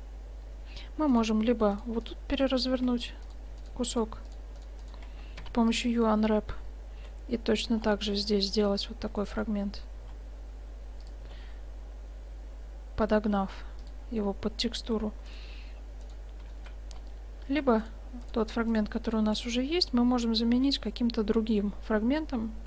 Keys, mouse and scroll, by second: 1.2-6.7 right drag, 5.4 u, 7.1 s, 7.6-11.1 drag, 8.1 g, 10.1 g, 11.3 s, 13.5 g, 15.3-16.6 drag, 16.6 middle click, 17.0 right click, 17.0 middle click, 17.8 click, 17.8-20.6 right drag, 18.4-20.6 drag, 20.6 g.